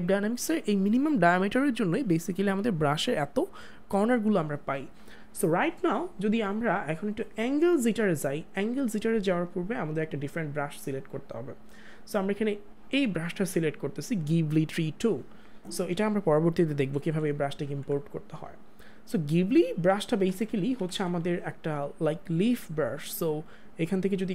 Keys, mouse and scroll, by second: 7.6 ctrl+z, 9.7 click, 9.9 click, 16.6 click, 16.8 ctrl+z, 22.2 click.